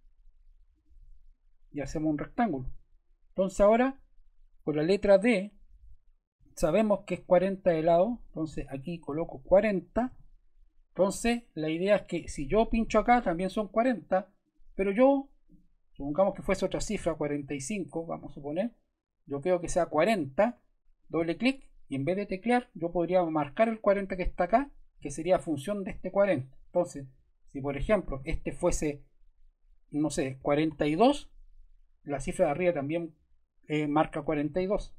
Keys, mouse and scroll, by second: 0.7 click, 1.7 click, 2.6 scroll, 3.6 click, 6.4 d, 8.2 click, 9.0 click, 9.7-10.5 typing, 11.1 Return, 12.6 click, 14.4 click, 16.7-17.7 typing, 18.1 Return, 20.4 ⟲, 20.9 click, 21.1 click, 26.6 Return, 30.4 typing, 30.9 Return, 34.3 click, 34.6 click.